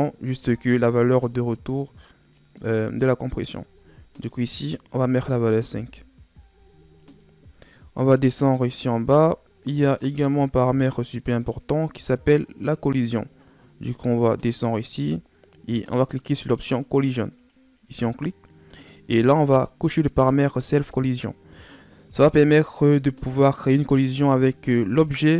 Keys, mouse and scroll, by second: 4.1-7.1 drag, 7.1-7.9 scroll down 4, 7.9-9.1 scroll down 8, 9.1-10.1 scroll down 9, 10.1-10.5 scroll down 3, 10.5-12.3 scroll up 14, 12.3-14.6 scroll down 20, 14.7-15.8 scroll down 4, 16.6-18.7 drag, 18.7-21.1 scroll down 5.